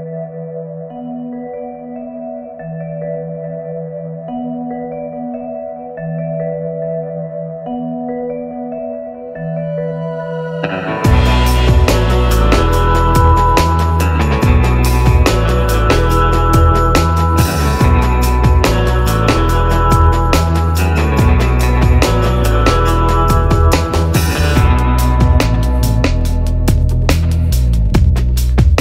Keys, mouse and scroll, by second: 5.6 scroll, 7.3-13.3 drag, 15.9 click, 16.0-27.3 drag, 27.3 scroll up 1, 28.4 scroll.